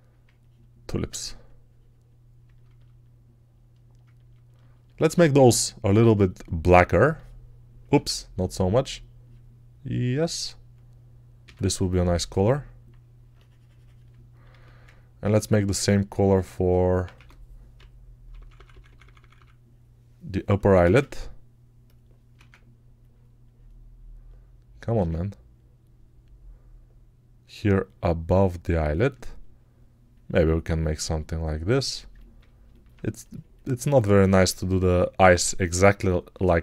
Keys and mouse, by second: 7.8 ctrl+z, 11.3 s, 15.2 alt+q, 17.0-19.2 typing, 20.7 ctrl+z, 22.3 ctrl+z, 24.9 ctrl+z.